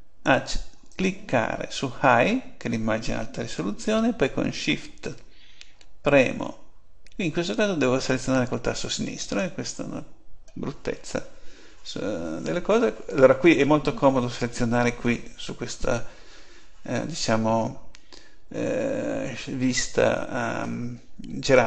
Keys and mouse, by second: 0.8-2.6 drag.